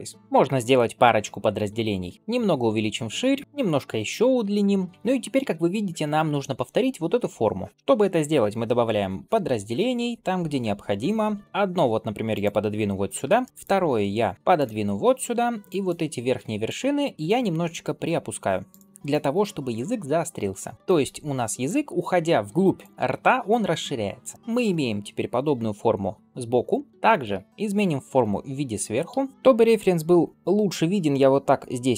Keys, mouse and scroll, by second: 0.1 middle click, 2.1 middle click, 2.1 s, 4.5 shift+middle click, 13.3 shift+middle click, 13.5 ctrl+r, 15.5 click, 16.2 alt+z, 17.7 g, 18.9 click, 19.6 g, 21.5 click, 22.2 g, 24.1 shift+middle click, 26.6 middle click, 28.9 KP_7.